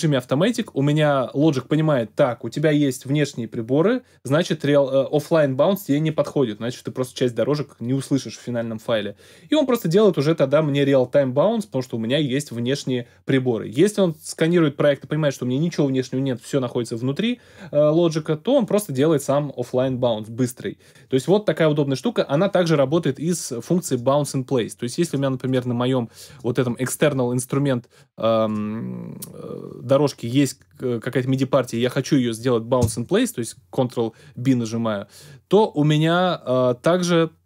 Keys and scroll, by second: 32.8 ctrl+b.